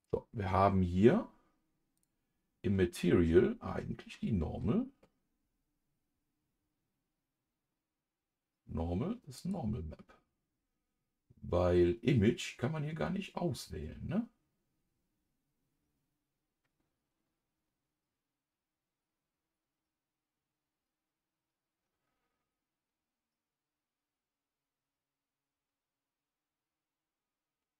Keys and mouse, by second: 1.9 click, 9.3-27.2 drag.